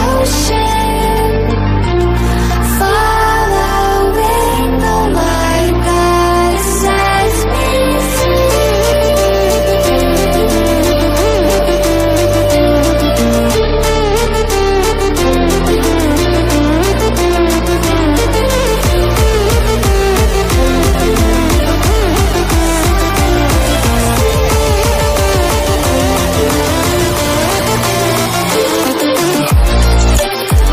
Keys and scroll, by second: 24.6 ctrl+-, 25.6 ctrl+d, 26.2 ctrl+=, 26.8 ctrl+-, 27.3 ctrl+=, 27.8 ctrl+-, 29.0 ctrl+0.